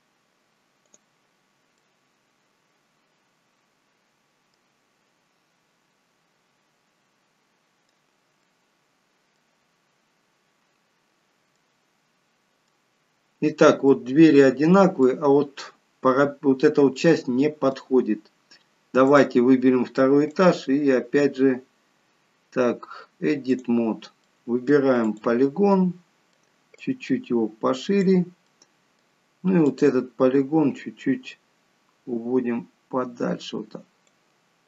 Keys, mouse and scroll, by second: 0.8 click, 1.8 middle click, 5.5 middle click, 5.5-6.2 scroll down 2, 8.4 middle click, 9.7-11.2 scroll up 2, 11.2 scroll down 1, 12.0 middle click, 13.9 middle click, 15.0 middle click, 17.1 middle click, 19.1 click, 20.2 click, 24.2 middle click, 25.0 click, 25.7 middle click, 26.7 click, 28.4 middle click, 29.7 click, 30.7 click.